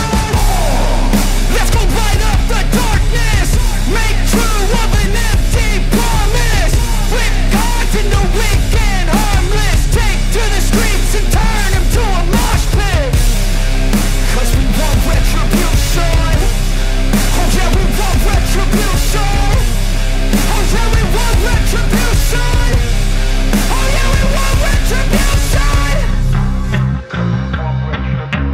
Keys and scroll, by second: 0.4 ctrl+alt+z, 1.0 space, 3.6 space, 10.1 ctrl+=, 10.4 ctrl+=, 10.7 ctrl+=, 11.4 space, 12.5 ctrl+=, 16.0 ctrl+alt+z, 16.9 space, 17.9 ctrl+alt+z, 19.6 space, 21.8 ctrl+alt+z, 25.9 ctrl+alt+z, 26.4 ctrl+alt+z, 26.6 ctrl+alt+z, 27.5 ctrl+alt+z.